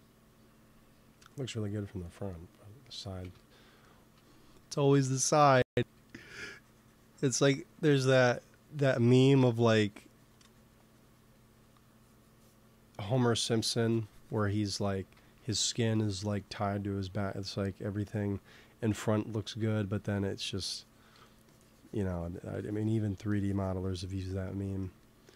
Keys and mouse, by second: 1.0 KP_3, 3.1 shift+c, 4.5 f, 5.1 f, 5.8 f, 6.5-8.3 drag, 13.0-15.0 drag, 15.0 x, 15.3 f, 15.8-17.6 drag, 17.0 f, 17.6 f, 18.9-20.0 drag, 19.9 f, 21.1 f, 24.3 click.